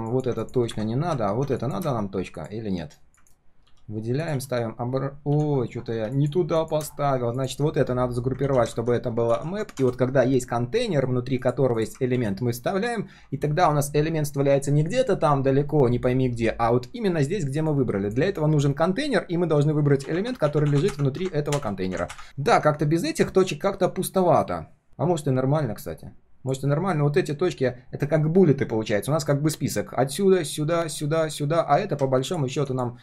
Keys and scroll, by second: 3.2 ctrl+shift+Return, 3.6 ctrl+x, 4.3 ctrl+v, 8.4 ctrl+g, 8.7 ctrl+r, 12.1 ctrl+v.